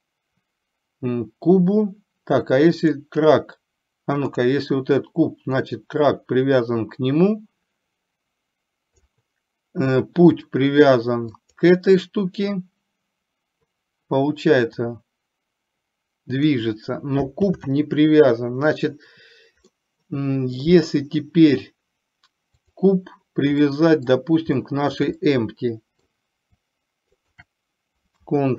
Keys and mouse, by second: 2.9 click, 5.8-9.2 drag, 11.7 click, 15.0-16.5 drag, 17.5 ctrl+z, 19.8-20.9 middle drag, 22.8 click, 23.7-24.3 middle drag, 24.7 shift+middle drag, 25.3-26.2 middle drag, 27.3 shift+click.